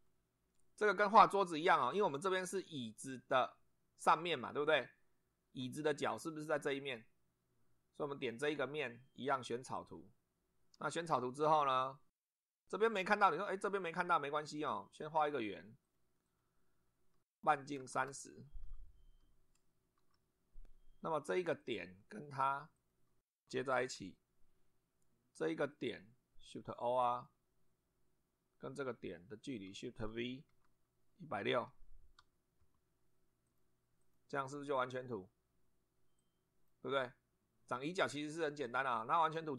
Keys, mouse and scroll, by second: 6.2 middle click, 8.2 click, 9.8 click, 11.1 shift+middle click, 12.0 shift+scroll up 1, 15.2 click, 15.8 click, 16.2 click, 16.7 Escape, 17.3 click, 18.0 shift+r, 19.2 0, 20.0 Return, 21.6 click, 22.8 click, 23.8 shift+o, 25.7 click, 27.1 click, 27.6 scroll down 1, 29.4 click, 30.5 shift+v, 31.6 1, 32.6 0, 33.5 click, 34.0 click, 36.2-36.9 drag, 37.8 click.